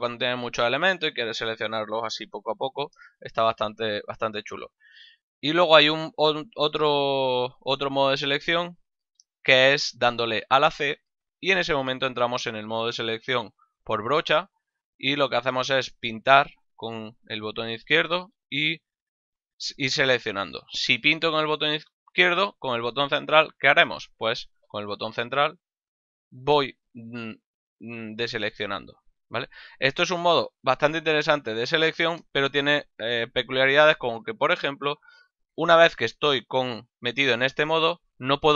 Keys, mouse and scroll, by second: 6.1 a, 9.1 c, 14.7 click, 16.7 click, 25.4 middle click, 28.3 click, 30.3 click, 35.5 middle click, 36.6 middle click, 38.2 middle click.